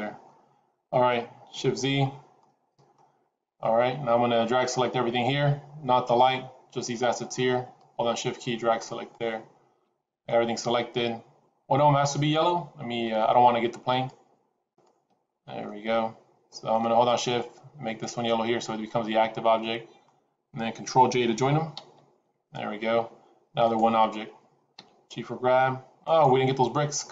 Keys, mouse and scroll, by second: 1.5 shift+z, 2.0 scroll down 3, 2.3 middle click, 3.1-4.1 scroll down 1, 4.9 scroll down 2, 7.7 shift+click, 10.2 middle click, 14.1 shift+click, 14.9 shift+click, 15.6 middle click, 19.2 shift+click, 19.2 scroll down 2, 19.5 middle click, 21.7 ctrl+j, 23.5 click, 24.6 g.